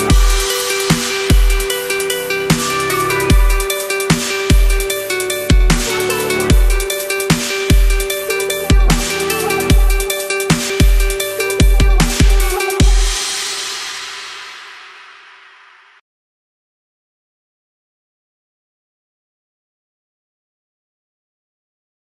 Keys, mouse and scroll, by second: 2.9-5.8 drag, 6.9-8.0 drag, 9.4 ctrl+a, 10.2 click, 13.2 ctrl+v, 13.8 click, 15.2 ctrl+-, 16.6 click, 18.2 BackSpace, 19.9 click, 20.6 Right, 21.4 click.